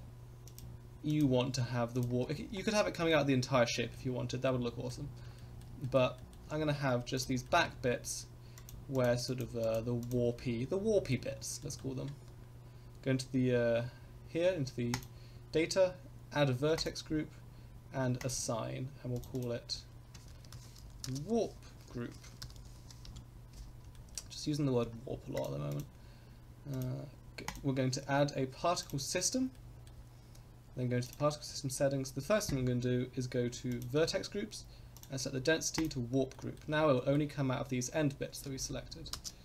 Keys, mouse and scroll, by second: 0.4 shift+click, 1.1 shift+click, 1.9 shift+click, 2.3 scroll down 2, 2.6 shift+middle click, 3.0 middle click, 3.7 shift+middle click, 4.1 scroll up 1, 4.4 shift+middle click, 5.0-5.3 scroll down 2, 5.3 shift+middle click, 5.8 middle click, 6.1 shift+middle click, 6.5-7.1 scroll up 2, 7.1 shift+click, 7.4 shift+middle click, 7.7 scroll up 1, 8.5 shift+click, 8.9 shift+click, 9.2 shift+click, 9.6 shift+click, 10.0 shift+click, 10.3 scroll down 2, 10.7 shift+middle click, 11.2-11.6 scroll down 1, 11.6 middle click, 14.9 click, 16.7 click, 18.2 click, 19.2 click, 19.3-23.6 drag, 23.9 shift+middle click, 24.4-24.8 scroll down 2, 24.8 Tab, 25.1 scroll up 2, 25.3 click, 25.7 click, 26.7 click, 27.4-28.9 drag, 29.5 middle click, 31.0 click, 31.4-31.8 scroll down 4, 33.7 click, 34.0-34.8 scroll down 2, 34.9-35.9 drag, 36.3 middle drag, 37.0 shift+middle drag, 38.4 space, 39.1 space, 39.3-39.4 middle drag.